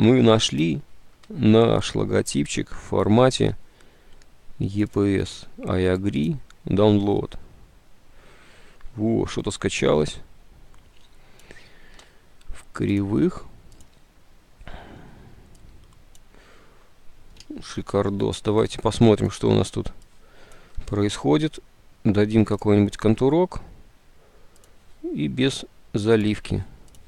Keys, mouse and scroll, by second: 17.9 ctrl+u.